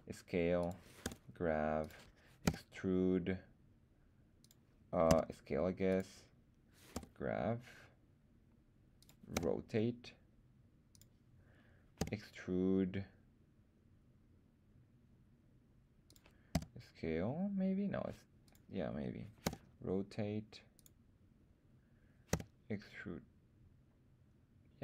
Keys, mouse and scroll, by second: 0.5 click, 1.0 g, 1.7 click, 2.4 e, 4.3 click, 5.0 s, 5.8 click, 6.8 g, 8.9 click, 9.3 r, 10.8 click, 11.9 e, 16.0 click, 16.5 s, 18.4 click, 19.4 r, 20.7 click, 22.2 e.